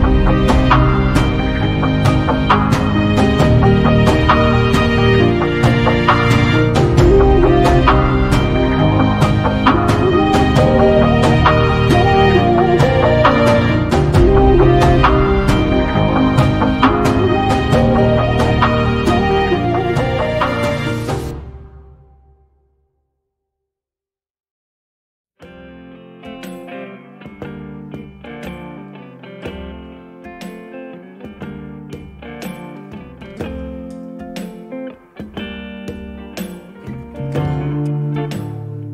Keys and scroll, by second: 11.3 space, 19.3 m, 21.7 space, 24.9 b, 30.7 space, 36.5 m.